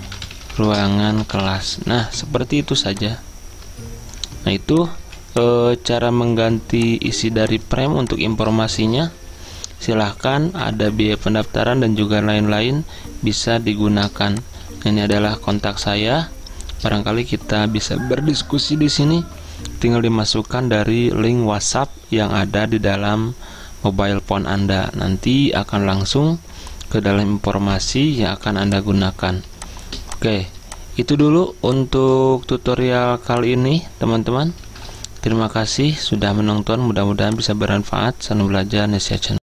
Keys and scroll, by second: 0.0-2.1 typing, 2.3 Escape, 5.1 z, 34.6-36.1 typing.